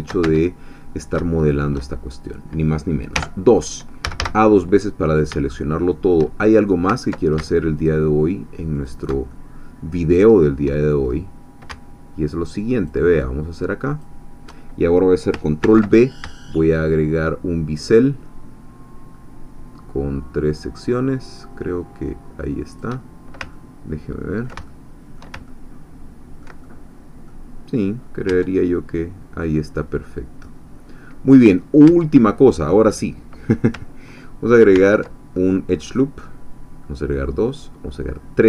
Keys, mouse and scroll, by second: 0.2 Tab, 0.7-1.2 shift+scroll up 3, 1.3 shift+middle click, 2.0 shift+scroll down 2, 3.1-3.7 scroll down 1, 3.1 2, 3.7-4.7 scroll down 1, 4.0 a, 4.7 scroll down 1, 4.8 click, 5.5 shift+scroll down 1, 5.6 shift+click, 6.3 shift+scroll down 1, 6.5 shift+scroll up 1, 7.8 alt+shift+click, 8.9 alt+shift+click, 9.3-10.4 alt+shift+middle drag, 11.1-11.4 shift+scroll up 1, 11.4 scroll down 1, 12.9-14.2 alt+shift+drag, 15.7 ctrl+b, 19.1 shift+scroll up 2, 22.8 shift+click, 23.5-27.0 ctrl+middle drag, 27.0 click, 28.0 scroll down 2, 28.3 Tab, 28.7-29.8 middle drag, 29.8-30.2 scroll down 1, 30.4 middle click, 31.4 scroll down 1, 31.8 Tab, 34.7 ctrl+r, 36.8 scroll up 2, 37.0 scroll down 2, 37.9-38.4 scroll up 2.